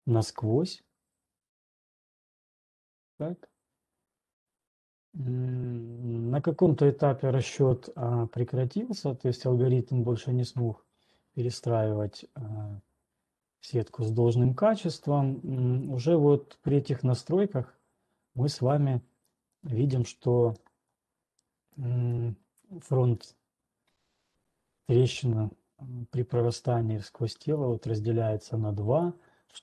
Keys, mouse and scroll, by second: 1.3 scroll down 11, 4.3 right click, 4.3 typing, 8.4 typing, 11.2 typing, 11.4-13.4 middle drag, 11.4 scroll, 12.0 scroll, 12.2 scroll, 14.1 scroll down 1, 15.0 scroll up 4, 15.8 scroll, 18.5 scroll, 19.5 scroll, 21.0 scroll, 21.6 scroll down 5, 22.1 click, 22.1 scroll down 3, 23.6 scroll, 26.9 scroll, 27.6-28.2 scroll, 29.0 scroll.